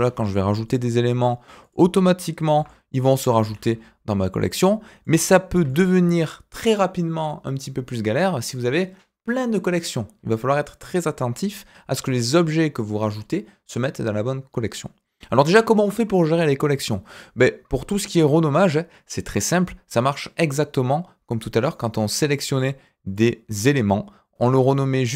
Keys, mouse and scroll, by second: 2.5 g, 3.4 shift+a, 5.0 middle drag, 5.6 g, 21.7 click, 22.5 click.